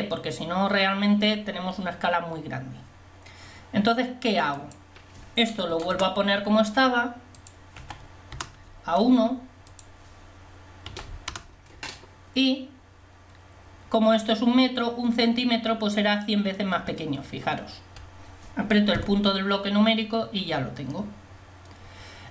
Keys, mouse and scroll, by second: 2.4-4.6 middle drag, 4.6-8.9 drag, 9.9-14.5 drag, 14.5-19.3 middle drag, 19.3 KP_Decimal.